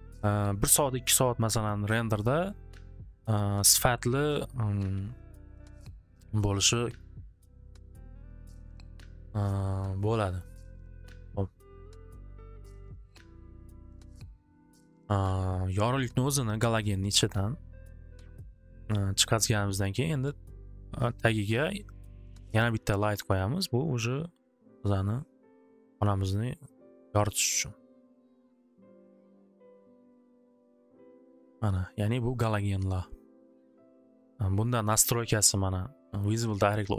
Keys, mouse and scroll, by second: 6.9-7.9 middle drag, 8.9-10.2 middle drag, 14.3 scroll, 15.8 middle click, 16.9 middle click, 17.2 click, 18.3 middle click, 22.0 click, 24.6 middle click, 26.3 click, 26.9 click, 27.4 click, 28.4 click, 28.7 click, 29.1 click.